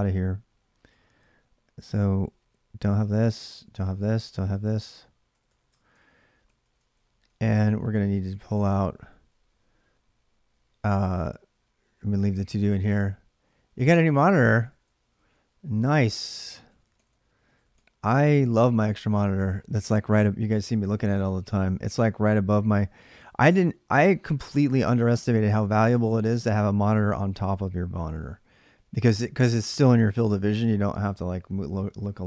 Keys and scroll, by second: 2.4-9.1 typing, 5.5 ctrl+[, 13.5-18.3 typing.